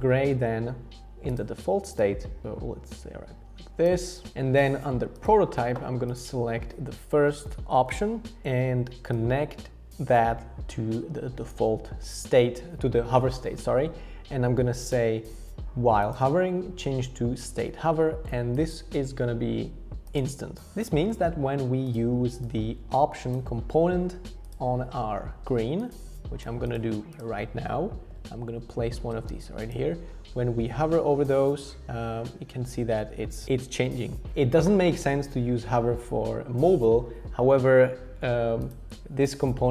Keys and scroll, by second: 28.0 alt+h, 28.1 alt+v.